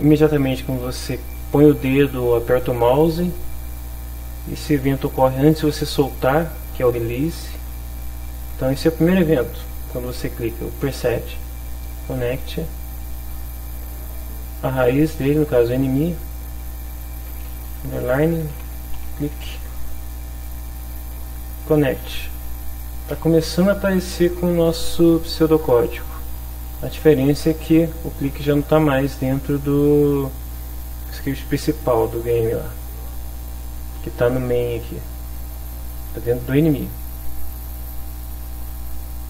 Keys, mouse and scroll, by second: 8.3 click, 9.3 click, 12.0 click, 13.8 click, 16.4 click, 17.8-19.4 typing, 21.7 click, 23.4 alt+Tab, 24.7 alt+Tab, 31.9 alt+Tab, 34.4 click, 36.5 click, 37.6 click, 38.9 click.